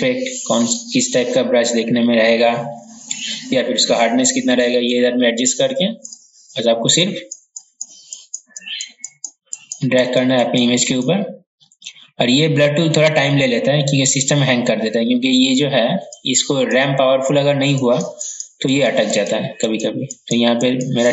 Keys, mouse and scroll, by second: 0.3-0.7 scroll down 1, 3.4-3.8 scroll up 1, 6.1-21.1 drag.